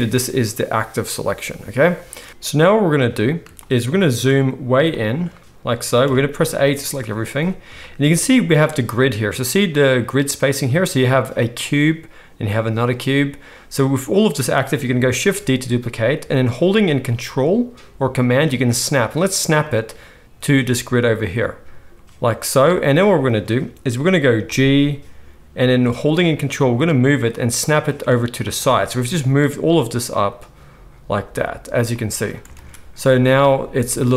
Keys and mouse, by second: 2.2-8.1 middle drag, 2.2 x, 6.0 a, 15.3 shift+d, 24.4 g, 32.5 alt+a.